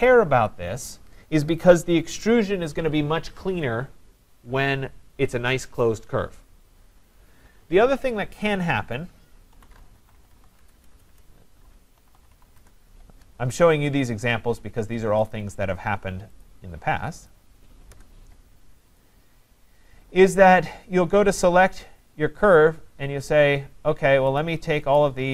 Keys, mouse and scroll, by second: 8.5-9.5 scroll, 9.3-14.4 typing, 9.8 scroll up 5, 13.4-15.3 scroll, 15.3 click, 16.3-17.0 typing, 16.4 click, 17.3 click, 17.9 Return, 19.0 click, 21.9 click, 24.2 click, 24.4 shift+click, 25.0 shift+click.